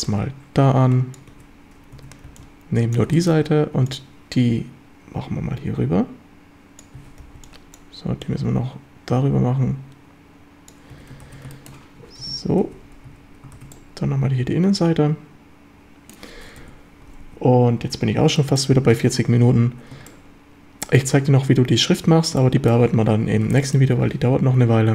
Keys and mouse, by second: 0.1-1.2 drag, 1.9 1, 1.9 a, 2.3 b, 3.1 shift+drag, 3.9-6.8 drag, 6.9 a, 7.2 b, 8.2-10.7 drag, 10.9 a, 11.3 ctrl+s, 11.5 shift+click, 12.2 Tab, 12.7 z, 13.1 a, 13.6 ctrl+s, 13.7-16.2 drag, 16.6 KP_7, 17.2 z, 18.4 shift+drag, 20.1 shift+middle click, 22.4-22.8 shift+middle drag, 23.6 shift+drag, 24.7 shift+a.